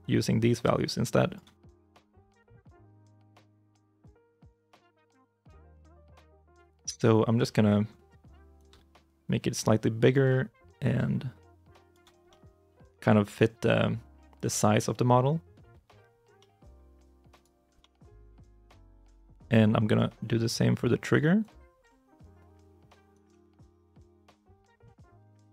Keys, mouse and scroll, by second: 1.5 scroll up 1, 1.5 middle click, 2.6 shift+middle click, 3.8 middle click, 6.6 middle click, 7.3 shift+middle click, 12.0 scroll down 1, 12.1 middle click, 14.1 scroll down 1, 14.2 middle click, 17.2 right click, 17.5 scroll up 1, 17.6 middle click, 21.2 double click.